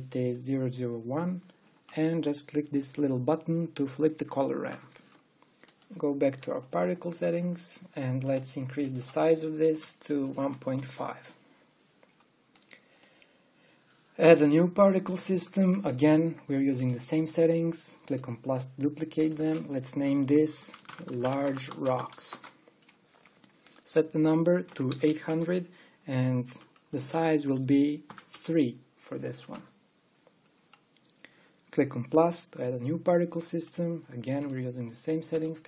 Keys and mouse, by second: 22.8-25.2 middle drag, 25.7 KP_0.